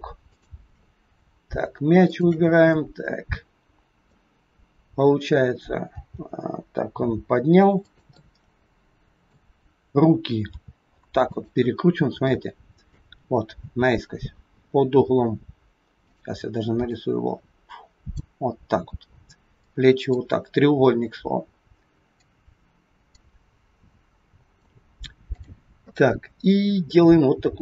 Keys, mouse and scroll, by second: 0.2 shift+click, 2.0 shift+click, 2.7 middle click, 4.4 scroll down 2, 5.0-5.8 scroll down 1, 5.9 g, 8.1 middle click, 10.5 r, 11.6-12.1 scroll up 4, 12.3 shift+middle click, 16.0 click, 18.1 click, 19.6 click, 22.2 click, 25.2 click, 26.6-26.9 scroll down 2, 26.9 middle click.